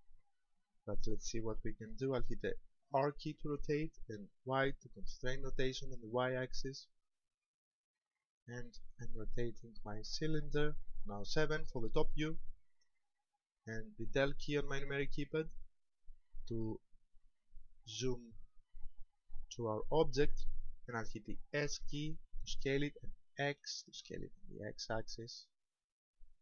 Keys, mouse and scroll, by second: 2.8 r, 10.3 ctrl+click, 11.9 KP_7, 14.5 KP_Decimal, 21.5 s.